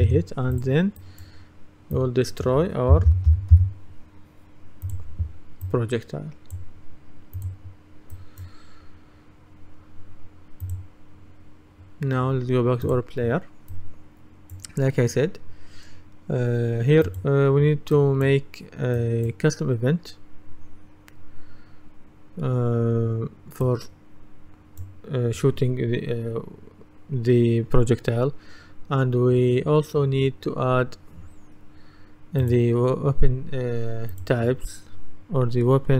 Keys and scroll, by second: 0.1 Return, 2.7-4.1 typing.